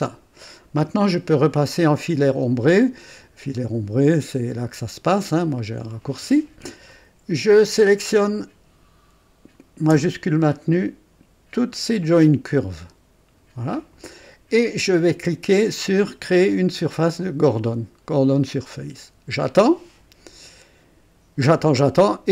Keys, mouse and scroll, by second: 0.0 click, 5.3 &, 7.7 click, 11.6 shift+click, 18.7 click.